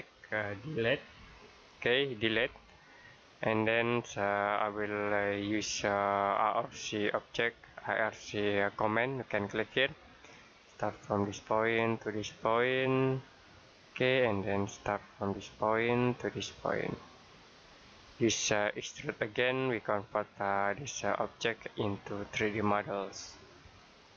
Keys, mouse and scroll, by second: 2.3 Delete, 4.2-4.6 scroll down 1, 4.6-6.9 scroll up 1, 9.6 click, 17.8 scroll down 1, 17.9-18.5 scroll up 1, 18.5-19.0 scroll down 1, 19.9 click, 22.2 middle click.